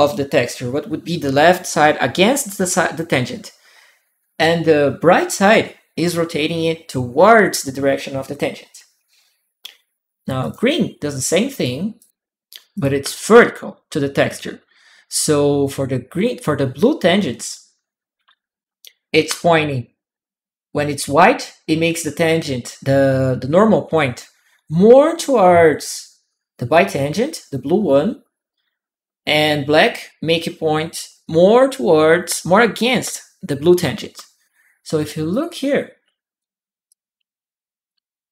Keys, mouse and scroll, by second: 10.2 click, 11.3 click, 11.8 click, 12.5 click, 35.1 click, 36.2-38.2 drag.